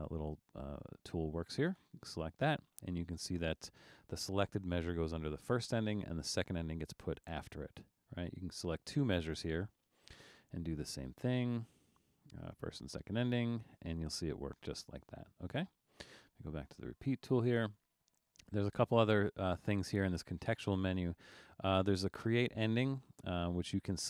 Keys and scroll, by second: 7.8 super+z, 15.6 super+z.